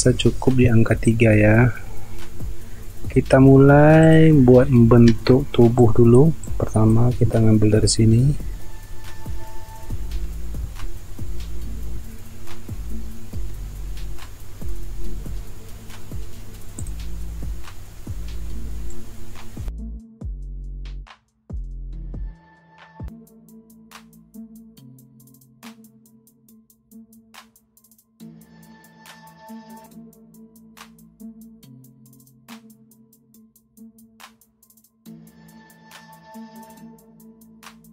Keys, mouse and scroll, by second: 2.5 alt+scroll up 1, 3.5 space, 5.6 space, 7.5 ctrl+scroll up 1, 8.2 alt+scroll up 1, 10.1 p, 12.1 alt+scroll up 1, 19.8 ctrl+alt+z, 20.8 alt+click, 22.1 ctrl+click, 22.5 alt+click, 22.6 alt+scroll down 1, 22.9 alt+scroll up 1, 23.8 alt+click, 24.1 alt+scroll down 1, 24.2 alt+scroll up 1, 24.6 alt+click, 25.2 alt+click, 25.3 space, 25.9-26.2 alt+scroll up 1, 27.0 alt+click, 27.1 alt+scroll up 1, 28.4 ctrl+alt+z, 28.8 alt+click, 29.4 alt+click, 29.5 alt+scroll up 1, 30.5 alt+click, 31.6 alt+click, 32.2 alt+click, 33.1 alt+click, 34.3 alt+click, 34.6 alt+click, 35.2 alt+click, 35.6 alt+click, 36.0 alt+click, 36.6 alt+click, 37.0-37.4 alt+scroll down 1, 37.4 space.